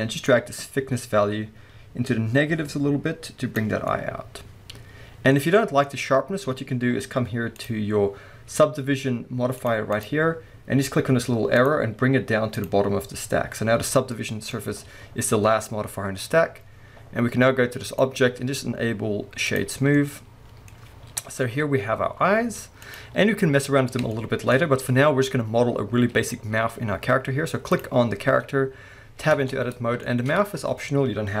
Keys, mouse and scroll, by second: 0.3-3.9 drag, 3.8 scroll down 2, 3.9-5.8 middle drag, 5.8 scroll up 1, 7.6 click, 9.6 click, 9.9 click, 11.6 click, 12.6 click, 14.1 middle click, 15.3 scroll down 1, 15.6 middle click, 17.9-20.0 drag, 19.8 scroll down 1, 20.0-22.8 middle drag, 21.2 KP_1, 21.4 alt+a, 21.9-22.4 scroll down 1, 22.4 scroll up 1, 22.8 click, 23.3-24.3 middle drag, 23.3-23.6 scroll up 1, 27.7 click, 28.1 scroll down 1, 29.3 Tab, 29.7-30.0 scroll up 2, 30.0-31.4 shift+middle drag.